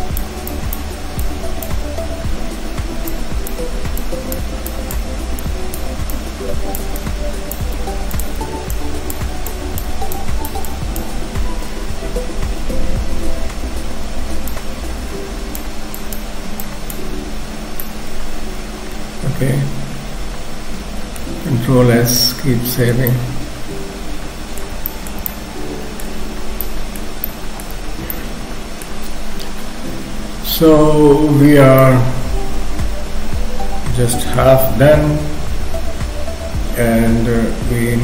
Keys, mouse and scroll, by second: 0.6 click, 7.0-8.4 shift+click, 8.2 click, 8.8 click, 9.5 click, 10.7 click, 11.2-12.8 scroll down 2, 14.6 click, 16.0 click, 17.6 scroll down 3, 17.8 middle click, 21.7 ctrl+s, 22.2 middle click, 23.1 middle click, 24.9 shift+middle click, 25.3 middle click, 26.2-27.0 scroll up 3, 26.6 middle click, 27.2 middle click, 28.1 middle click, 31.8 middle click, 34.6 KP_3, 36.5-36.8 scroll up 1.